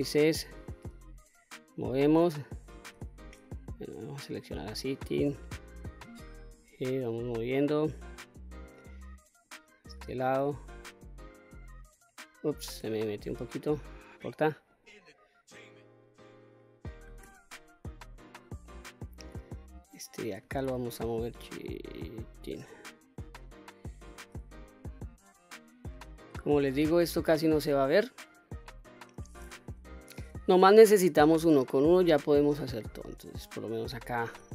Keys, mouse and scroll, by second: 0.4 g, 1.3 click, 2.5 q, 3.0-4.1 middle drag, 5.0 click, 6.1 g, 7.0 click, 7.6 middle click, 9.0 click, 10.0 g, 10.8 click, 12.4 g, 12.9 click, 14.3 click, 15.6-16.1 middle drag, 16.8 g, 17.7 click, 18.3-18.7 middle drag, 19.3 click, 20.3 g, 21.9 click, 22.3 middle click, 23.9 g, 24.7 click, 25.1-28.5 middle drag, 28.5 scroll down 1, 29.2 KP_1, 30.4 shift+middle click, 31.1-31.5 scroll up 2, 31.7 shift+middle click, 32.3-33.5 scroll up 2, 33.9 q.